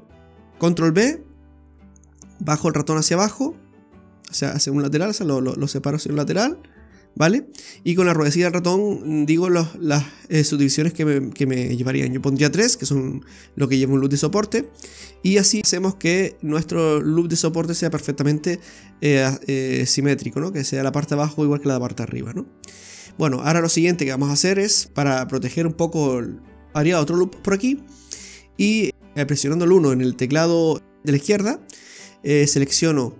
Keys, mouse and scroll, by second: 0.8 ctrl+b, 15.4 click, 15.4 middle click, 15.6 scroll up 2, 18.3-18.7 scroll down 1, 18.7 middle click, 21.8-22.3 scroll down 2, 22.2 middle click, 24.9 right click, 25.3 click, 26.0 right click, 27.3 middle click, 27.8-28.4 scroll up 2, 31.7 right click, 32.8 shift+right click.